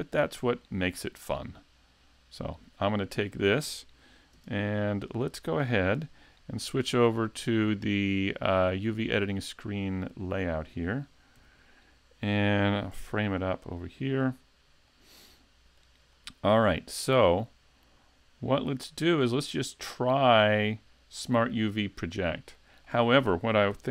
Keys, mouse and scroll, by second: 0.6 right click, 2.4 click, 3.4 shift+middle click, 4.4 KP_Decimal, 4.9 middle click, 5.5 scroll down 2, 7.7 click, 11.4 n, 11.9-12.9 scroll down 1, 12.9 KP_Decimal, 13.8 middle click, 14.4 scroll down 1, 14.9 middle click, 16.1 shift+middle click, 17.0 middle click, 22.9 shift+middle click, 23.7 n.